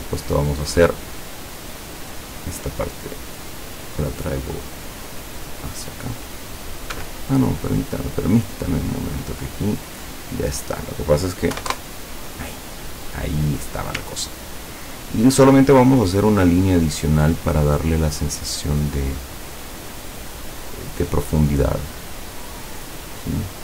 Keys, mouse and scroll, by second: 1.2 click, 4.7 click, 7.0 Escape, 8.2 click, 9.2 click, 10.8 click, 11.6 KP_1, 11.7 KP_Enter, 14.2-14.6 ctrl+scroll up 2, 15.1 ctrl+scroll up 2, 16.1 click, 18.0 click.